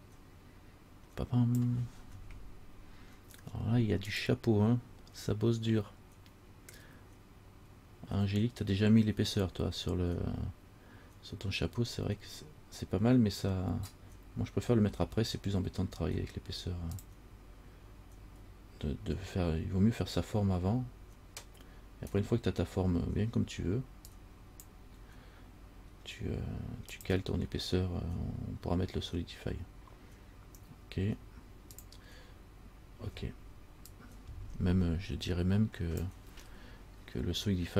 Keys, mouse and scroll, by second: 0.5 ctrl+q.